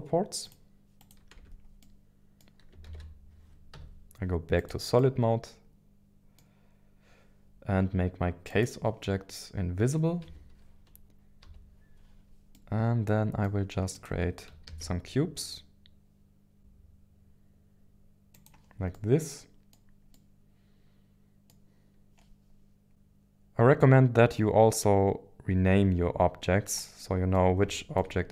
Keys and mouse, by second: 1.4 Tab, 1.8-2.7 middle drag, 2.9 ctrl+s, 3.7 z, 4.9-6.4 middle drag, 8.4 click, 10.2 KP_1, 10.8 KP_3, 12.5-13.5 middle drag, 13.9 click, 14.7 shift+a, 16.6 g, 16.6 z, 18.3 click, 18.9 middle click, 20.1-21.5 middle drag, 27.0 middle click, 27.7 shift+middle click.